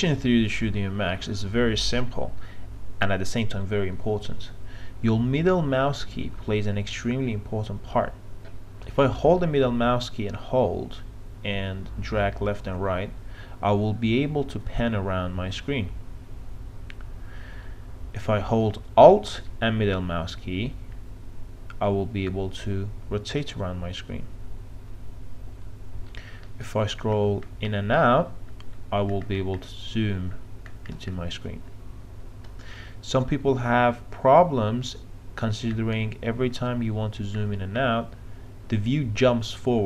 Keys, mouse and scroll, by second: 9.4-18.5 middle drag, 19.5-26.2 alt+middle drag, 27.1-28.0 scroll down 1, 28.0-29.1 scroll up 1, 29.1-30.0 scroll down 1, 30.0-30.6 scroll up 1, 30.6-31.5 scroll down 1, 31.5-35.8 scroll up 1, 35.8-36.6 scroll down 1, 36.6-37.4 scroll up 1, 37.4-38.7 scroll down 1, 38.7-39.8 scroll up 1.